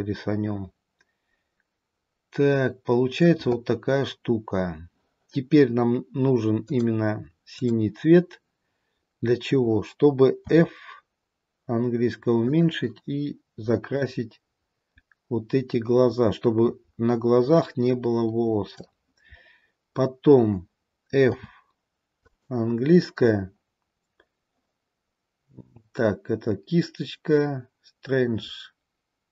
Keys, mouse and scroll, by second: 6.6 click, 14.0 click.